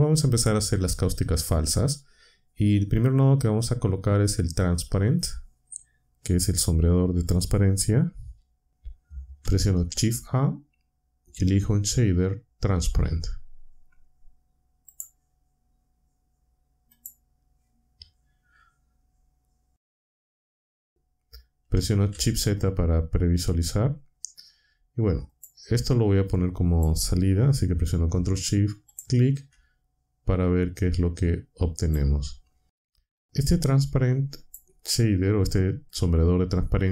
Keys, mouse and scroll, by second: 9.4 shift+a, 14.9 click, 16.9 click, 20.1 z, 22.1 z, 25.3 click, 25.8-26.9 drag, 28.9 ctrl+shift+click, 30.9-32.1 drag, 33.2-34.7 drag.